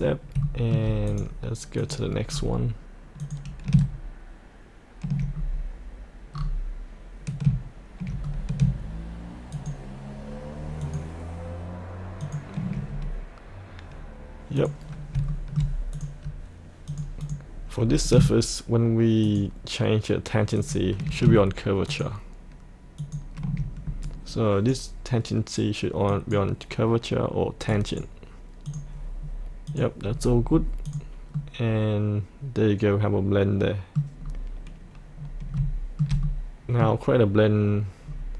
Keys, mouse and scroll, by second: 0.4 shift+middle click, 1.0 click, 2.3-3.2 scroll down 2, 3.2 click, 5.3-6.3 scroll down 1, 8.2-8.6 scroll up 1, 9.5 ctrl+click, 10.8 ctrl+click, 12.2 ctrl+click, 12.8-14.6 scroll up 1, 14.6 click, 14.9 scroll up 1, 15.3 shift+middle click, 15.9 click, 17.8-18.1 scroll down 1, 19.2 ctrl+click, 20.5 ctrl+click, 21.9 ctrl+click, 23.0 ctrl+click, 24.0 right click, 26.0 click, 27.7 right click, 28.6 click, 30.1 scroll up 1, 30.8 click, 31.3-34.2 middle drag, 34.2 scroll down 1, 35.1-35.5 scroll up 1, 35.5 middle click, 36.2 middle click, 38.0 scroll down 1.